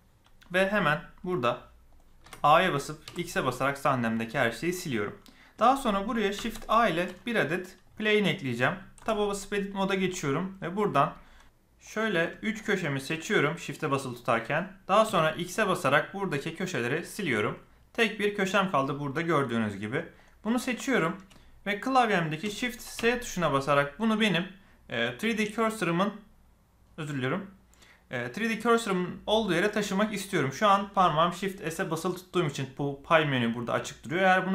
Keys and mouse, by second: 2.2 a, 3.0 x, 6.3 shift+a, 8.6 click, 8.9 Tab, 11.8 click, 12.6 shift+click, 13.2 shift+click, 15.0 x, 21.0 shift+middle click, 22.9 shift+s.